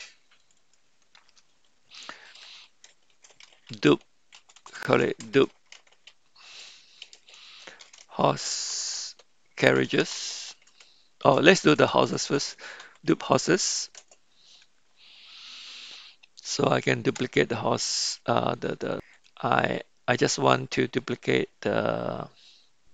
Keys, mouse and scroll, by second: 0.4 click, 0.8-14.8 drag, 4.6 BackSpace, 4.9 BackSpace, 11.9 BackSpace, 12.3 BackSpace.